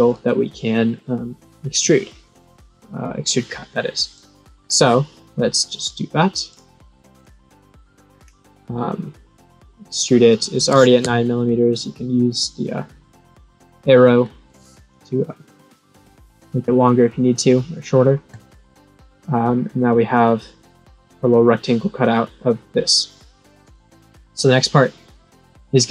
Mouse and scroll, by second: 4.1 click, 5.2 middle click, 6.4 click, 7.1 click, 8.0 scroll down 3, 11.8-14.2 drag, 15.8-16.2 scroll up 1, 18.2 click, 19.2-19.7 scroll up 1, 20.0 scroll down 1, 20.4-20.8 scroll up 1.